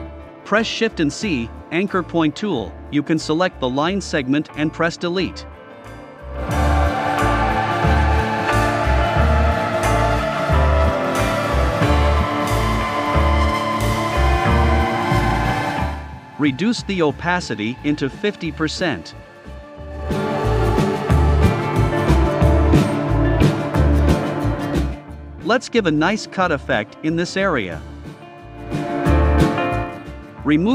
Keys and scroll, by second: 0.7 BackSpace, 2.2 a, 6.9 BackSpace, 9.2 BackSpace, 11.6 BackSpace, 12.3 v, 17.7-18.5 typing.